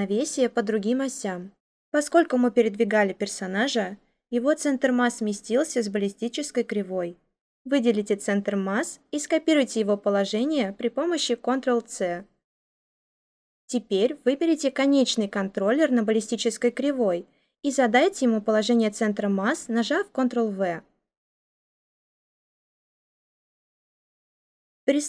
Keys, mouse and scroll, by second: 11.3 ctrl+c, 20.0 ctrl+v.